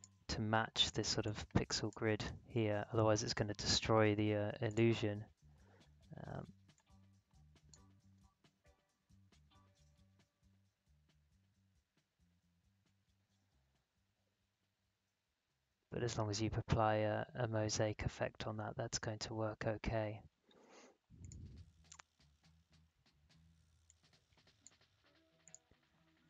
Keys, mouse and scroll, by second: 4.6 click, 8.0 space, 17.4 space, 19.8 space, 21.2 click, 22.4-22.8 scroll down 1, 23.8-25.4 drag.